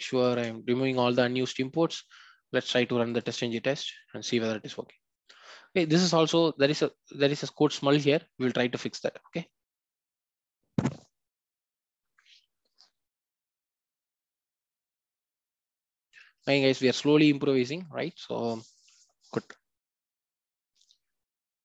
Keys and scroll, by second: 0.3 ctrl+alt+o.